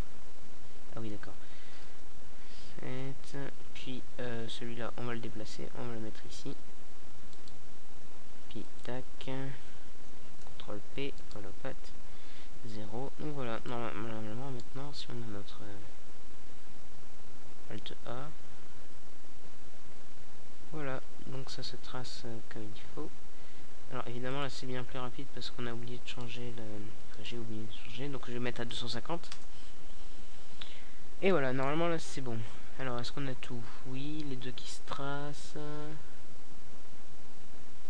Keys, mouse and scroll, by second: 1.0 ctrl+p, 2.9 KP_0, 3.1 middle click, 6.7 a, 8.6 alt+a, 14.5 a, 16.6-18.4 middle drag, 21.7-23.3 drag, 25.4 a, 33.9 click.